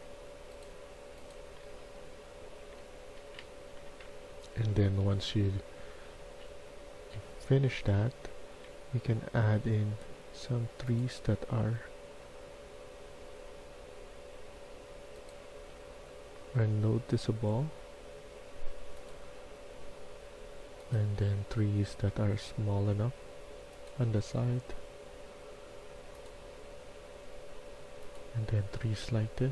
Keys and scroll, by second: 1.2-3.8 typing, 4.7 Escape, 5.0 Escape, 8.2 s, 11.0 s, 15.4 s, 21.1-21.9 d, 22.0 d.